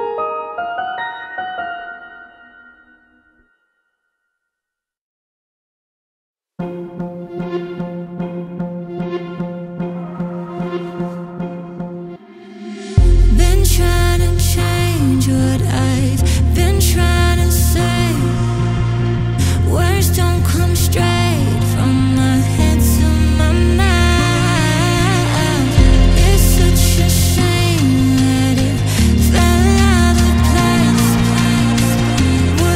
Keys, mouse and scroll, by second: 1.8 ctrl+click, 2.3 middle click, 3.1-4.2 scroll down 9, 4.2 middle click, 4.6 scroll up 5, 5.0 middle click, 5.4-6.1 scroll up 4, 6.1-7.9 middle drag, 7.9-8.5 scroll down 4, 8.5 middle click, 9.4-10.0 scroll down 7, 10.0-12.3 middle drag, 12.3 click, 13.8 x, 14.1-15.2 scroll up 12, 15.4-17.1 scroll down 22, 17.5 Tab, 18.0 Tab, 18.9 click, 19.5 click, 20.2-21.4 drag, 21.4-22.1 scroll up 9, 23.7 ctrl+z, 24.8-26.9 scroll down 7, 26.9 click, 27.8-29.7 drag, 29.7-31.0 scroll up 13, 31.0-32.7 middle drag.